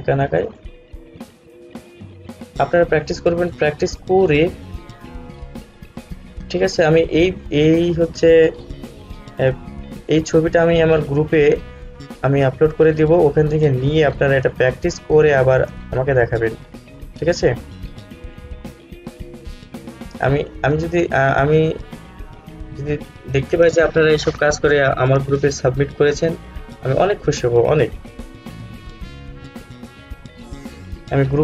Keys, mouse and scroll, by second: 6.6 click, 11.3-31.4 drag.